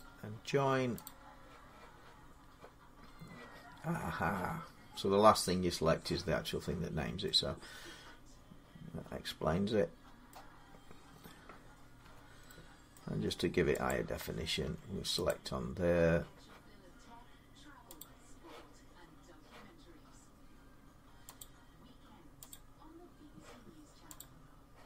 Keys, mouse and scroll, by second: 0.8 click, 10.0 middle click, 10.5-11.8 scroll up 4, 11.8 Tab, 12.7 middle click, 12.9 Tab, 13.7 click, 14.4 Tab, 14.4 middle click, 15.1 click, 17.8 click, 21.2 click, 22.3 click, 24.0 click.